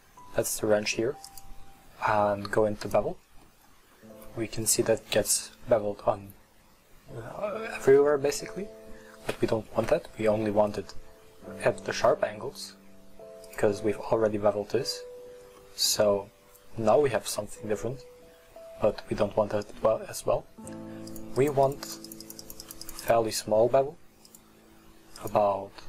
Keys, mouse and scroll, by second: 1.3-3.5 drag, 3.5 middle click, 3.9-4.3 scroll up 1, 4.3-7.4 middle drag, 8.1-11.2 middle drag, 13.6 click, 14.1-20.6 middle drag, 21.1-23.7 drag, 24.4 click, 25.2-25.8 drag.